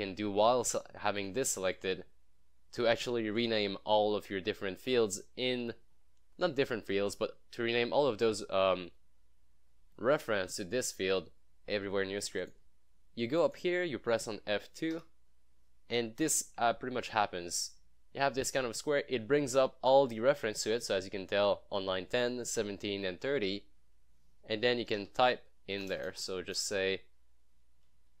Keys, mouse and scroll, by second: 1.2 click, 4.5 scroll down 1, 5.9 scroll up 1, 12.5 click, 16.8 F2, 19.5 scroll down 1, 20.3 scroll, 20.4 scroll up 1, 22.4 scroll down 1, 23.4 scroll, 23.5-24.9 scroll up 1, 24.7-25.8 typing.